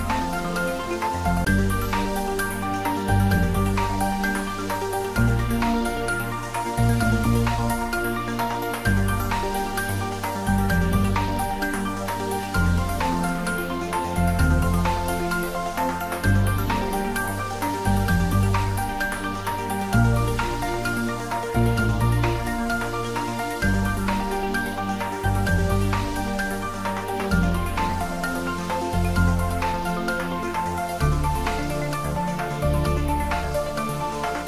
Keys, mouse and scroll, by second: 2.6 scroll down 1, 3.8-6.6 middle drag, 6.6 scroll up 1, 11.9-15.4 middle drag, 19.4 click, 22.7 shift+d, 23.4 y, 28.7 click, 32.4-33.4 typing.